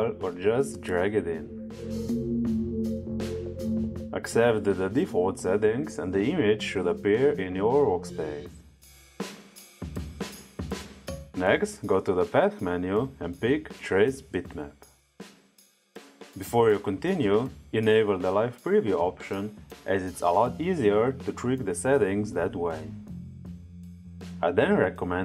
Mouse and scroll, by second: 1.4 click, 3.2 click, 5.8 click, 7.1-8.6 drag, 11.2 click, 15.0 click, 17.9 click.